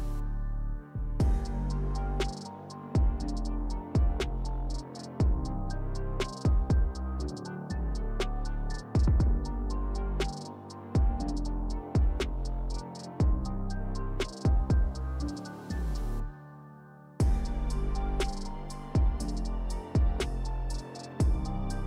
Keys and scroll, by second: 1.8 s, 5.7 2, 9.3 s, 12.9 b, 15.0 s, 18.3 s, 19.1 ctrl+z, 19.3 s.